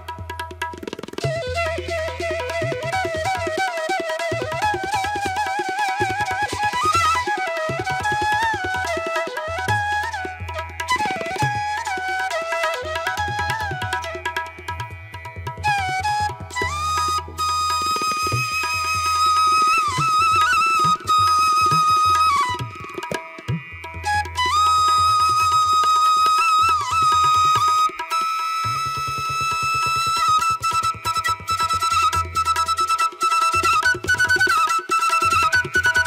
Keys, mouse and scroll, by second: 0.3 ctrl+=, 0.6 space, 0.8 ctrl+=, 2.3 space, 2.5 ], 3.6 space, 4.2 space, 4.9 space, 8.0 space, 8.5 ], 8.6 ctrl+alt+z, 25.3 ctrl+alt+z, 26.2 ctrl+alt+z, 28.2 ctrl+=, 28.4 space, 34.3 space.